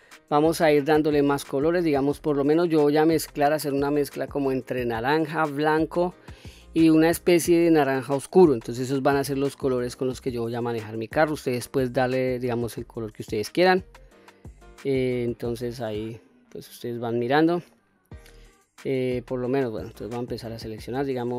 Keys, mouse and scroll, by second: 1.4 scroll down 1, 1.7-2.5 middle drag, 9.5-10.2 middle drag, 10.5-11.4 scroll up 1, 11.4-11.8 middle drag, 12.2-14.0 scroll down 2, 14.0-14.4 scroll up 1, 14.4-15.5 middle drag, 16.0-16.9 middle drag, 17.6-19.0 middle drag, 19.7 click, 20.9 middle click.